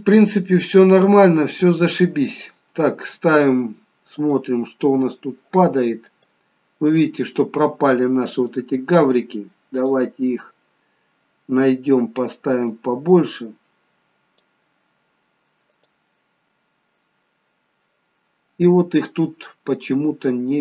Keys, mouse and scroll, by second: 0.8-1.5 scroll up 2, 1.5-2.4 scroll down 1, 2.4 click, 4.2 click, 6.5 click, 9.8 click, 11.1-11.8 scroll down 2, 12.8 click, 12.8-14.8 scroll down 4, 18.9-20.6 scroll down 2.